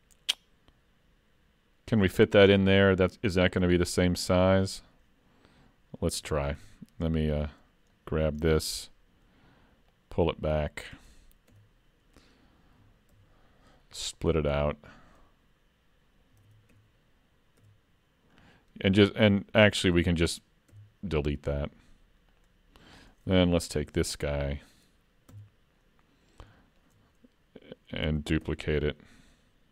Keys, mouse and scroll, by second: 2.3 middle click, 3.8 scroll up 2, 4.1 shift+middle click, 6.3 alt+a, 6.6 3, 7.3 click, 8.0 middle click, 8.4-9.3 scroll up 1, 9.3-9.6 scroll up 2, 9.9 click, 11.5 2, 13.2 ctrl+e, 16.4 alt+a, 16.7 3, 17.6 l, 18.3-19.1 scroll down 4, 19.1 click, 20.8 x, 23.7 l, 24.2 middle click, 25.3 KP_3, 26.2-26.5 scroll up 2, 26.5 shift+middle click, 28.1 shift+d.